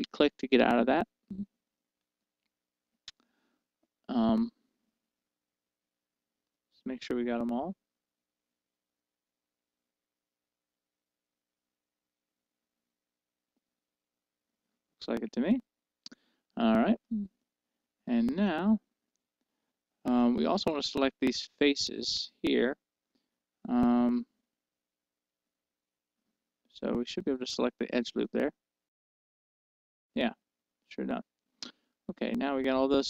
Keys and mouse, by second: 0.0-2.2 right drag, 2.2-4.1 middle drag, 6.7-8.8 middle drag, 17.6-19.0 middle drag, 20.4-22.2 middle drag, 29.2-30.4 right drag, 30.4-33.0 middle drag.